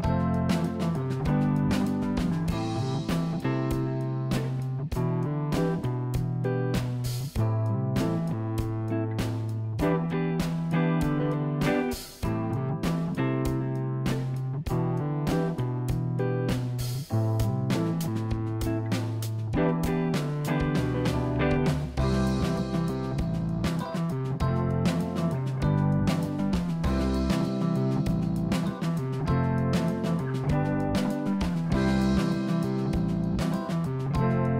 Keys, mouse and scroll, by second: 13.6 click, 15.5-17.3 drag, 17.6-17.9 scroll up 2, 18.4-18.9 scroll down 2, 18.9 click, 20.9 click, 21.4 click, 22.0 click, 22.4 click, 28.9 click, 31.1-32.4 drag.